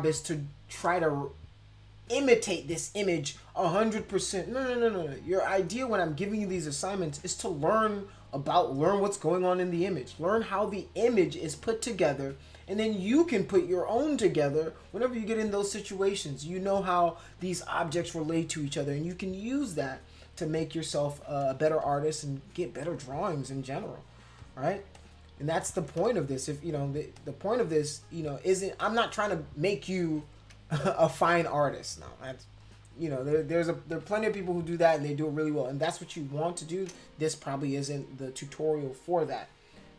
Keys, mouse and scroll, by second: 21.7 space, 21.8 click, 22.8-24.2 drag, 24.4 click, 24.9 click, 26.0 click, 26.0 space, 27.1-28.7 drag, 30.8 space, 30.9 click, 31.4 click, 32.6 click, 33.9 ctrl+-, 34.7 ctrl+=, 35.5 space, 35.8 middle click, 35.8 click.